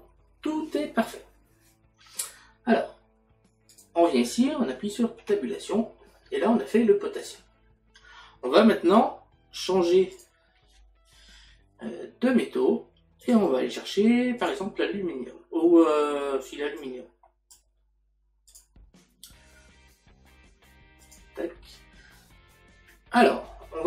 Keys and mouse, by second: 3.7 click, 6.4 middle click, 10.2 click, 13.2 click, 14.4 click, 16.8 click, 18.5 click, 21.0 click.